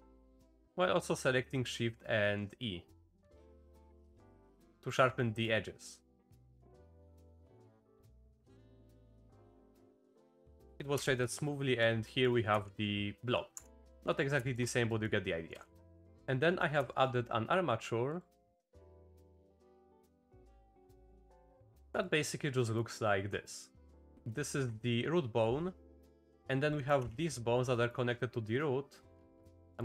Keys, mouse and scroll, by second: 5.2 click, 7.0 click, 7.6 click, 8.6 click, 9.0-10.4 drag, 9.0 a, 10.9 Tab, 11.2 click, 12.0 drag, 12.5 g, 14.4 shift+click, 14.9 click, 15.5-16.0 typing, 16.1 click, 16.9 shift+click, 18.1 click, 19.9 click, 20.6 h, 21.3 click, 21.8 shift+drag, 22.0 drag, 22.6 click, 24.1 shift+z, 24.5 shift+click, 26.7 click, 27.0 Tab, 27.7 click, 29.4 Tab.